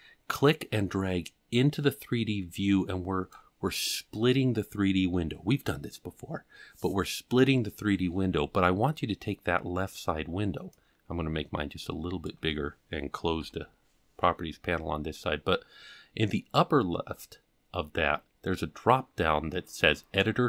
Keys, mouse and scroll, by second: 0.3-3.3 drag, 10.7-12.3 drag, 13.4 n.